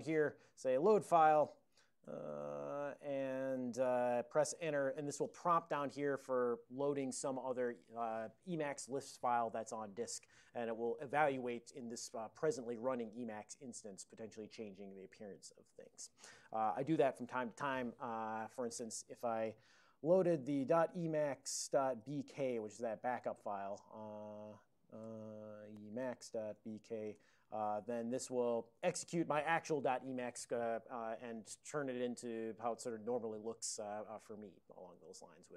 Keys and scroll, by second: 0.0-3.8 typing, 20.6-23.7 typing, 25.2-27.1 typing, 27.2 Return.